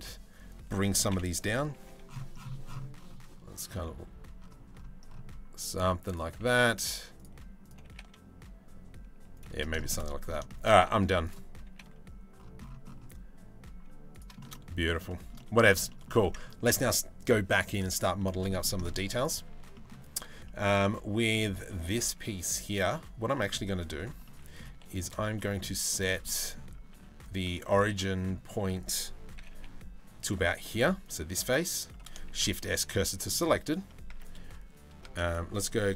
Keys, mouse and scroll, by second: 0.7 o, 1.4 g, 5.9 g, 7.5 g, 9.4 shift+middle click, 9.6 middle click, 10.1 shift+middle click, 10.4 middle click, 10.9 click, 11.3 g, 14.0 shift+middle click, 14.1 middle click, 14.7 shift+middle click, 15.5 middle click, 16.3 Tab, 17.8 middle click, 18.1 shift+middle click, 19.1 Tab, 19.4 middle click, 20.1 shift+middle click, 20.9 middle click, 22.4 3, 23.0 middle click, 23.9 middle click, 24.4 3, 25.0 shift+middle click, 25.9 middle click, 26.5 ctrl+r, 27.6 middle click, 29.0 g, 30.3 3, 30.7 click, 31.9 shift+s, 33.7 Tab, 34.6 Tab, 34.9 click, 35.7 ctrl+l.